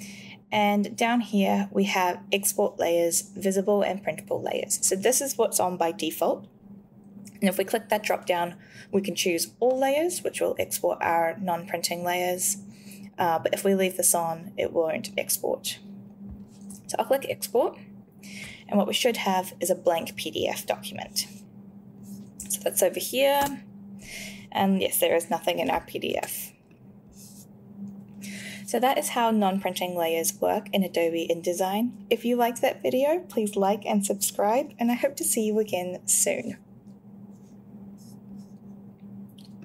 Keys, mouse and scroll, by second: 7.6 click, 15.0 click, 17.5 click, 23.4 space, 26.1 space.